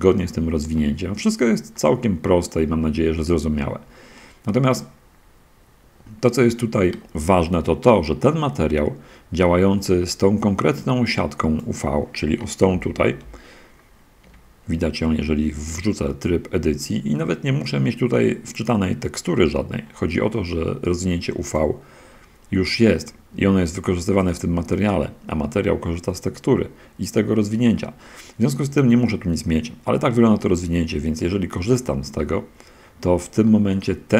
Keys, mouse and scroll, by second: 0.9 click, 1.1-1.9 middle drag, 2.1-3.1 middle drag, 3.1-3.9 drag, 3.9-4.5 middle drag, 4.5-6.4 drag, 7.5 click, 8.5 middle click, 8.5-8.9 scroll down 1, 11.1 click, 13.1 shift+F10, 14.1 Tab, 24.5 click, 28.7 scroll up 1, 30.6 Tab, 31.9 scroll up 1, 32.1-34.1 middle drag.